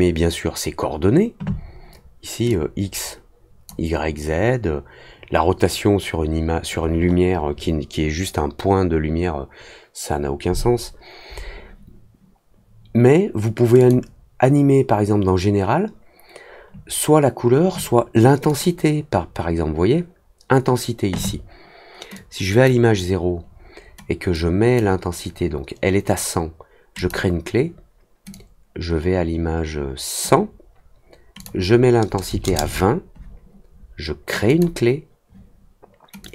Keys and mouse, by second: 2.4-3.6 drag, 13.7 click, 18.4 click, 22.1 click, 24.3 click, 26.9 click, 28.3-30.2 drag, 31.3 click, 34.4 click, 36.2-36.3 drag.